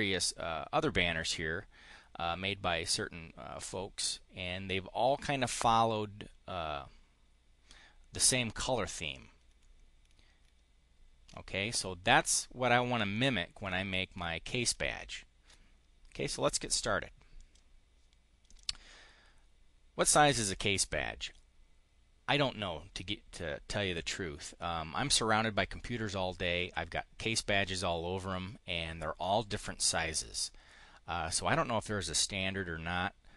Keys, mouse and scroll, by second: 17.2 click, 18.3 click.